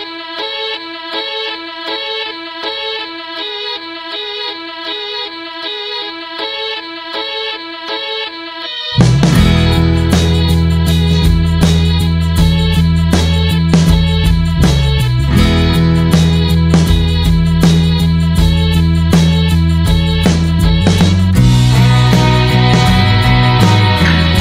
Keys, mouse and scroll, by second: 0.9 click, 1.5-1.8 scroll down 2, 1.8 middle click, 2.0 scroll up 1, 2.3 shift+middle click, 2.7 `, 2.9 middle click, 3.2 scroll up 1, 3.3-4.6 shift+middle drag, 4.6 click, 5.0 /, 5.5 middle click, 6.4 click, 8.1-10.2 drag, 10.4 middle click, 11.2 scroll down 1, 11.4-14.9 middle drag, 14.9 t, 15.5 click, 15.7 scroll down 1, 15.9 middle click, 16.2-17.1 scroll up 3, 17.7 click, 18.2-19.2 middle drag, 19.2 click, 21.0 alt+middle click, 21.8 alt+middle click, 22.0-22.5 scroll down 1, 22.5 click, 23.4 alt+middle click, 23.7-24.3 scroll up 3, 24.0 shift+middle click.